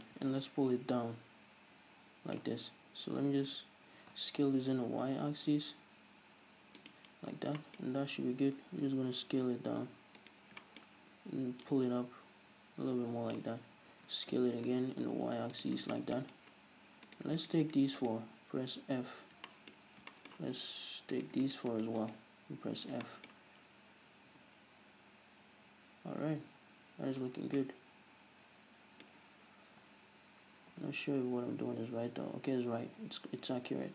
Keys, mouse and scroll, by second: 0.1-7.0 drag, 3.2 s, 7.6-11.7 shift+middle drag, 7.9-8.8 scroll up 2, 8.8 s, 11.7-15.8 drag, 14.0 s, 15.8-17.1 shift+middle drag, 15.8 scroll down 2, 16.3-17.1 scroll up 2, 17.1 right click, 17.5 shift+right click, 18.0 shift+right click, 19.1 f, 19.3 scroll down 2, 19.5-21.2 shift+middle drag, 19.9 scroll up 1, 21.2 shift+right click, 21.8 shift+right click, 22.1 shift+right click, 22.8 f, 22.9-33.9 shift+middle drag, 22.9 scroll down 1, 24.4 Tab, 27.4 scroll down 2, 30.3-30.8 scroll up 2, 30.8 b.